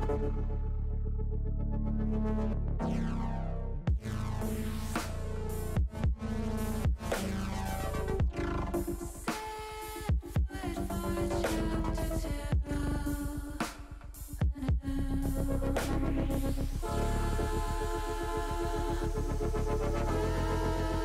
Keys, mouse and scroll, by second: 2.2 ctrl+KP_Add, 2.6 ctrl+KP_Add, 2.8 ctrl+KP_Add, 5.8 ctrl+KP_Subtract, 6.9 middle click, 7.8 middle click, 9.3 shift+click, 10.2 middle click, 11.0 shift+click, 11.4 middle click, 12.3 shift+click, 13.0 shift+click, 13.4 middle click, 13.6 middle click, 14.0 middle click, 14.9 middle click, 17.4 click, 18.0 click, 18.6 middle click, 18.9 middle click, 20.1 shift+middle click.